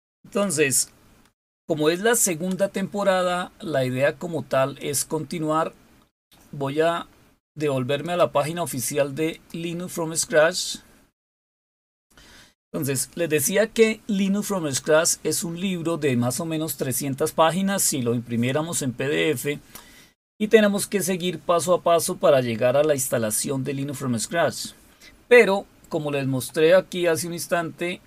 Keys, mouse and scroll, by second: 4.5 click, 7.8 click, 9.0 click, 27.8 click.